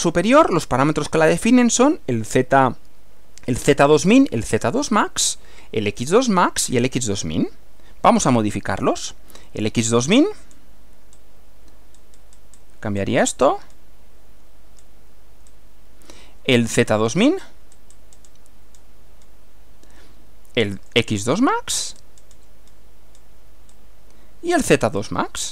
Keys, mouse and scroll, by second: 10.1 click, 10.5 scroll down 2, 11.1 scroll up 2, 12.0-12.7 scroll up 2, 13.0 scroll down 2, 13.7 scroll down 2, 14.8 scroll down 2, 15.5 scroll up 1, 16.9 click, 17.4-18.1 scroll up 4, 18.3-19.5 scroll down 5, 20.8 click, 21.3-22.2 scroll up 2, 22.2-22.5 scroll down 1, 22.7-23.4 scroll down 4, 23.7 scroll up 2, 24.6 click, 25.0-25.5 scroll up 4.